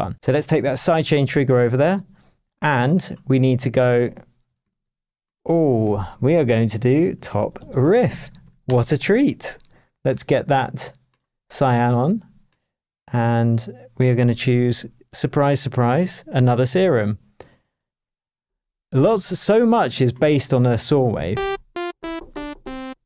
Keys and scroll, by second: 4.6 shift+super+t, 5.8 super+r, 7.0-8.7 typing.